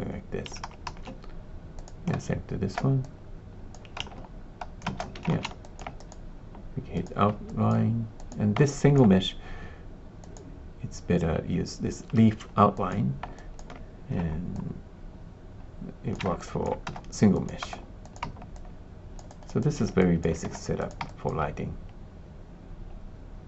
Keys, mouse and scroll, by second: 0.6 shift+z, 0.8 shift+z, 1.7 click, 2.1 ctrl+space, 3.0 click, 4.0 space, 4.8 ctrl+space, 5.3 alt+shift+z, 5.6 alt+click, 7.1 click, 7.4 alt+click, 8.1 click, 8.6 alt+click, 10.1 click, 12.8 click, 13.3 alt+click, 14.5-16.1 shift+drag, 16.3 alt+click, 16.8 space, 17.3 click, 17.6 space, 18.6 alt+click, 19.2 alt+click, 19.6 alt+click, 19.9 alt+click, 20.7 click, 20.7 space, 21.0 alt+click.